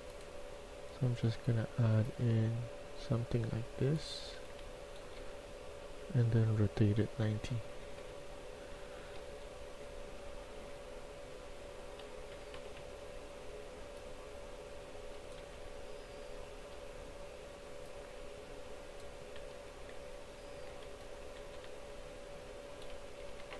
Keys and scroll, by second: 3.7-5.1 typing, 7.4-8.1 typing, 10.6 Tab, 12.2-12.7 typing, 15.2-15.9 typing, 19.2 a, 19.8 a, 21.0-21.7 typing, 23.0 Escape, 23.2 Escape, 23.3-23.5 typing.